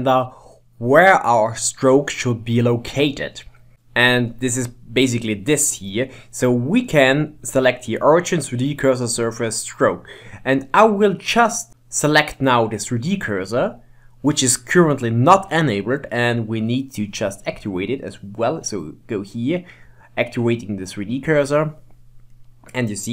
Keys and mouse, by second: 6.2-9.2 drag, 11.7-14.7 drag, 17.6-20.6 drag, 23.0 middle click.